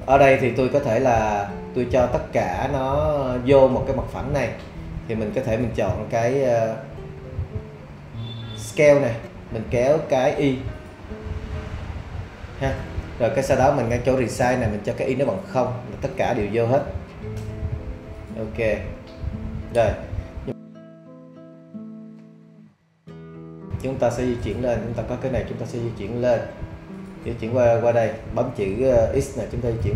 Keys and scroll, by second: 16.8 0, 17.4 Return, 29.4 x.